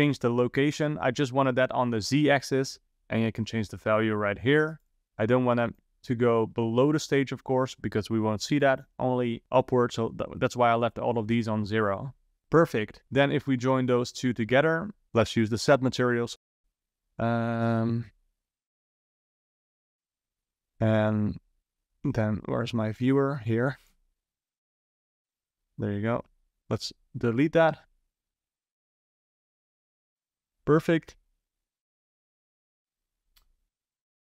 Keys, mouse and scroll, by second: 2.9-4.8 drag, 5.8-8.8 drag, 12.4-12.8 middle drag, 12.8 scroll down 1, 13.0-14.3 middle drag, 14.3 click, 15.4-16.6 scroll up 3, 18.5 scroll down 1, 18.8 middle click, 19.2-21.7 scroll down 4, 21.7 ctrl+shift+click, 23.4-23.9 drag, 24.5 click, 25.6 click, 26.3 x, 28.6-29.4 scroll down 1, 32.0 ctrl+s.